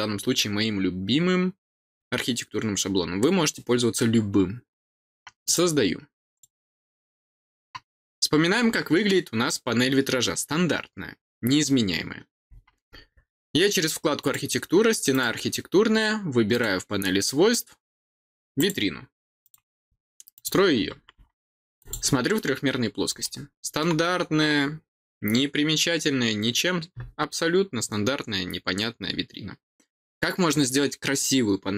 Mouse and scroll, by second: 5.4 click, 6.3 click, 14.1 click, 15.1 click, 16.5 click, 18.5 click, 19.4 click, 20.3 click, 21.7 click, 23.2 middle click.